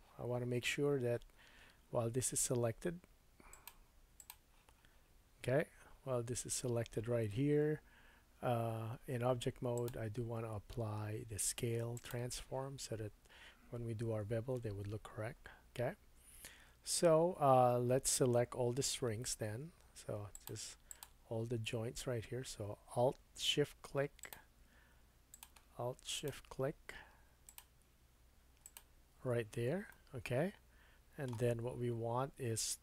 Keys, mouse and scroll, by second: 3.5 click, 3.7 middle click, 4.2-20.5 drag, 15.3-16.1 scroll up 2, 16.1-18.5 scroll down 1, 19.0 Tab, 20.9 alt+click, 24.2 alt+shift+click, 25.3 alt+shift+click, 26.2 alt+shift+click, 27.4 alt+shift+click, 28.6 alt+shift+click, 30.3 shift+middle click, 31.7-32.8 middle drag.